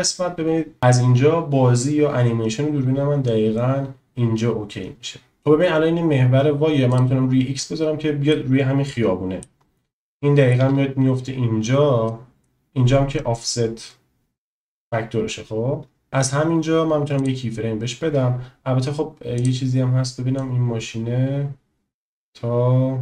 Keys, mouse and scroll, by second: 7.0 click, 8.3-9.5 middle drag, 10.1-10.5 shift+middle drag, 12.1-16.0 drag, 17.5 click, 19.6 click, 20.5-23.0 drag.